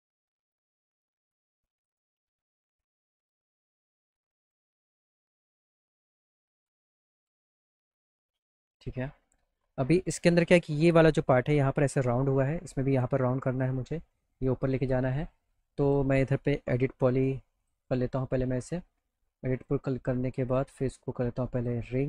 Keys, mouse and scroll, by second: 1.8 click, 3.5 click, 4.4 click, 5.3 middle click, 5.7 middle click, 5.7 middle click, 6.6 p, 7.2 z, 7.4 alt+middle click, 8.3 alt+middle click, 9.0 middle click, 13.2 middle click, 14.7 middle click, 15.1 middle click, 15.8 click, 16.8 e, 17.6 click, 19.6 click, 20.5 click, 21.5 click.